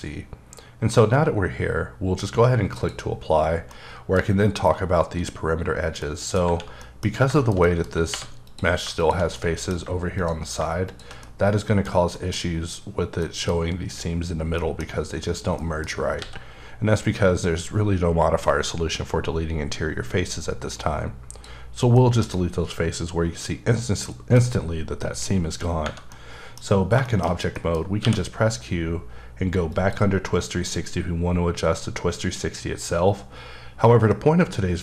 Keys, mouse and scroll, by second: 0.8 scroll down 1, 2.7 click, 3.4-3.7 scroll down 1, 3.7 middle click, 6.0 middle click, 6.8 middle click, 8.1 3, 8.4 click, 9.0 double click, 9.3 middle click, 10.2 shift+click, 10.9 shift+double click, 11.2 middle click, 13.2 middle click, 14.6 middle click, 15.6 middle click, 16.2 x, 20.7 click, 22.0 middle click, 24.0 middle click, 25.4-25.8 scroll down 2, 26.1 middle click, 27.2 shift+scroll down 2, 27.5 middle click, 28.0 q, 29.7 click.